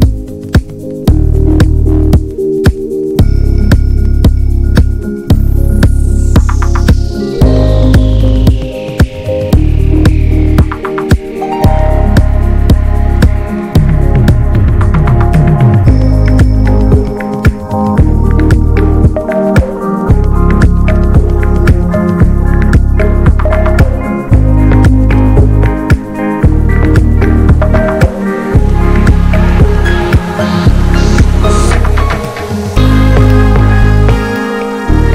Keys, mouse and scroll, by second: 2.7 middle click, 3.1 scroll down 2, 3.4-5.6 middle drag, 6.3 alt+middle click, 6.7 alt+middle click, 11.0 b, 11.4-12.4 middle drag, 12.4-12.9 scroll up 1, 14.1 b, 14.4-15.6 middle drag, 15.6-15.9 shift+scroll up 1, 15.9 middle click, 16.5-16.8 scroll up 2, 16.8-20.2 middle drag, 20.2-29.5 drag, 29.7-31.1 alt+middle drag, 31.1-32.4 drag, 32.9 alt+middle click, 34.1-35.1 drag.